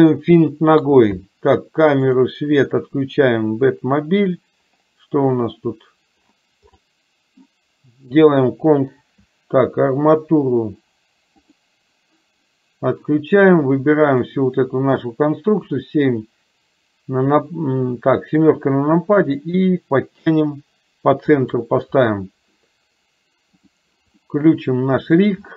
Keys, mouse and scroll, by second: 0.1 click, 2.1 click, 2.6 click, 11.5 click, 13.8 click, 15.5 KP_7, 18.4-21.6 drag, 23.7 click, 24.3 middle click.